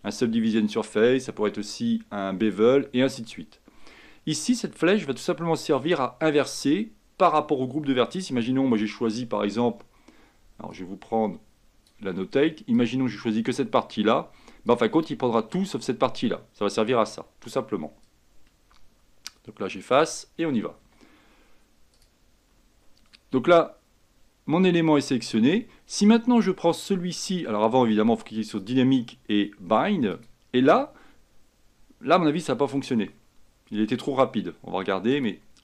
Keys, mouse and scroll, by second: 10.8-15.9 drag, 18.1-20.9 ctrl+drag, 20.9 Escape, 22.0-32.5 drag, 32.5-32.9 scroll up 3, 33.1 scroll down 1, 35.2-35.6 drag.